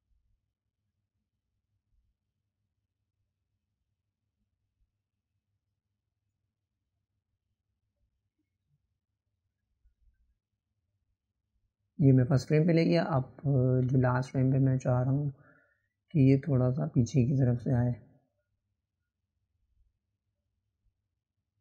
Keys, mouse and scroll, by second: 1.8 click, 6.9 click, 7.0 click, 9.4 click, 12.8-14.0 drag, 17.6-18.8 drag, 21.5-21.6 drag.